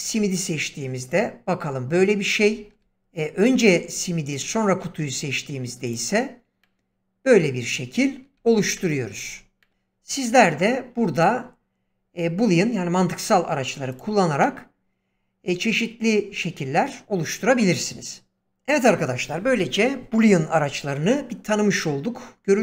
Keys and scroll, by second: 2.5 ctrl+z, 8.3 ctrl+z.